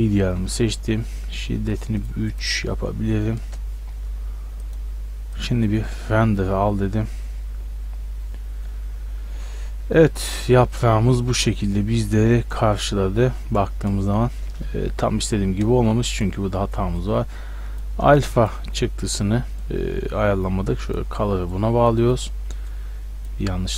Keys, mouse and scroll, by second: 2.0-4.2 drag, 4.6-7.4 drag, 12.0-15.2 middle drag, 15.2 Escape, 15.3-16.1 middle drag, 16.1 Escape, 17.0-18.6 drag, 18.9-21.5 drag, 21.5-22.2 drag.